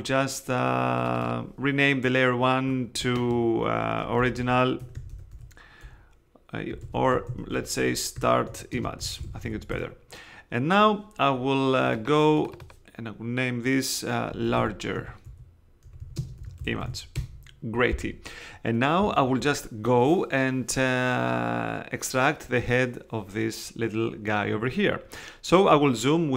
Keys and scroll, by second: 3.9-5.8 typing, 6.7 super+i, 6.8 super+a, 7.3-10.0 typing, 14.2-17.3 typing.